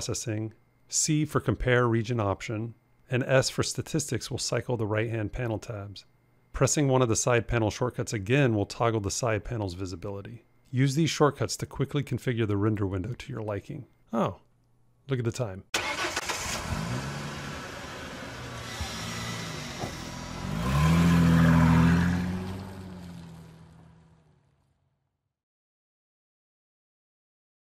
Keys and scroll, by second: 0.7 c, 2.9 s, 6.3 s.